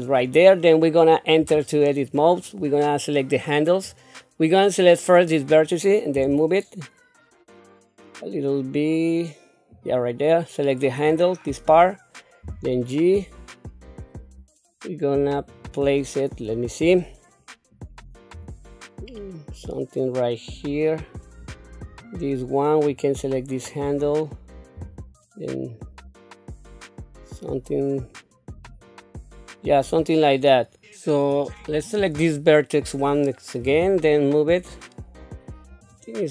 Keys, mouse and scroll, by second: 1.5 Tab, 2.6 click, 2.8-3.8 drag, 6.2 g, 11.0 click, 12.4 g, 17.7 click, 18.3 g, 21.4 click, 22.9 click, 24.7 g, 29.7 click, 31.3 click, 33.6 g.